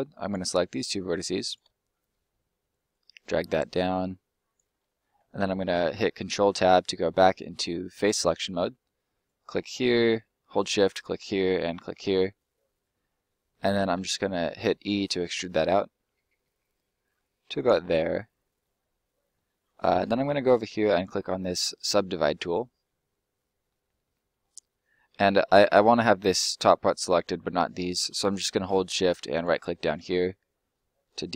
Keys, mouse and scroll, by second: 0.2 right click, 0.6 shift+right click, 1.8 scroll down 1, 1.9 middle click, 2.8 click, 4.7 scroll down 1, 4.8 middle click, 7.9 click, 9.1 right click, 9.6 shift+right click, 10.8 shift+right click, 12.2 middle click, 13.9 e, 17.5 click, 17.8 middle click, 18.7 scroll down 1, 18.9 middle click, 22.4 click, 23.0 middle click, 23.8 scroll up 1, 24.0 middle click, 29.3 shift+right click, 30.6 shift+right click.